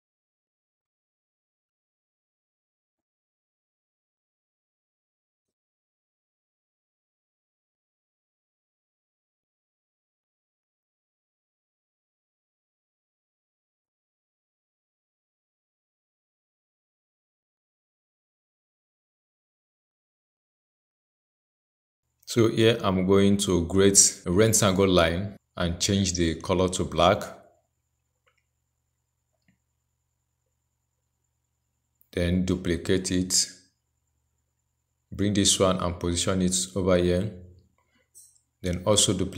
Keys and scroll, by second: 10.9 ctrl+j, 14.3 ctrl+a, 16.6 ctrl+v, 31.2 ctrl+j, 38.9 ctrl+j.